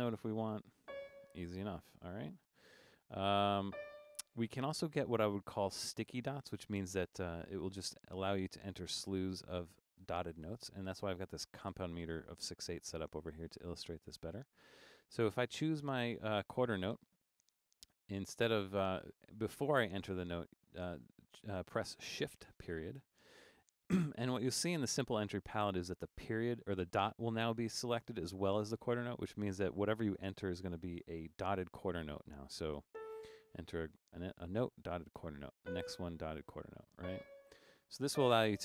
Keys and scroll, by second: 0.9 c, 2.2-3.7 typing, 7.9 Right, 8.6 Right, 9.2 Right, 9.4 Right, 10.0 Right, 10.4 Right, 10.9 Right, 11.8 Right, 13.9 Down, 14.0 Down, 14.1 Down, 16.2 5, 23.0 shift+>, 33.0 a, 35.6 b, 36.7-38.1 typing.